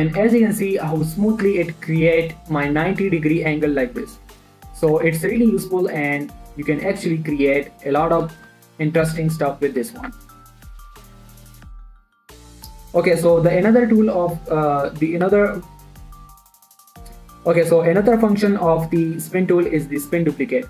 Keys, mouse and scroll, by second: 0.6 e, 0.8 x, 1.7 click, 1.8 Tab, 2.2 middle click, 4.4 1, 5.2 shift+middle click, 5.5 Tab, 5.7-6.1 scroll up 1, 6.4 shift+right click, 7.3-8.8 drag, 8.8 scroll down 1, 9.1 shift+middle click, 9.4 e, 9.7 z, 10.4 click, 10.5 Tab, 10.7 scroll down 1, 10.8 middle click, 11.7 scroll up 1, 11.9 middle click, 12.7 x, 12.9 click, 14.0 shift+click, 14.0 shift+middle click.